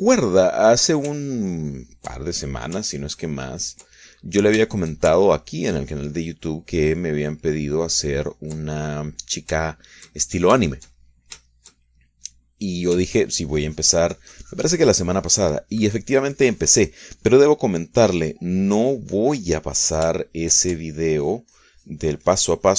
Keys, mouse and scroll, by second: 0.1-2.1 drag, 2.4-3.5 ctrl+drag, 3.5 ctrl+middle click, 4.1-5.6 ctrl+drag, 5.9 ctrl+shift+middle click, 6.5-9.8 ctrl+shift+drag, 9.9 ctrl+middle click, 10.9-13.7 shift+middle drag, 13.9 ctrl+middle click, 14.3-21.2 ctrl+drag, 21.4 ctrl+shift+middle click, 22.1-22.7 ctrl+shift+drag.